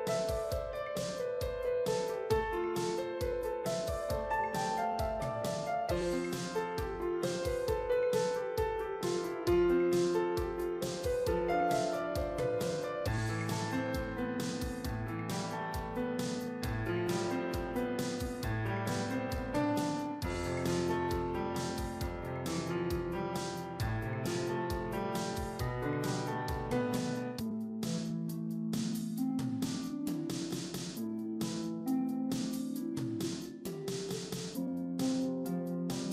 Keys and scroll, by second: 1.6 ctrl+t, 8.2 ctrl+t.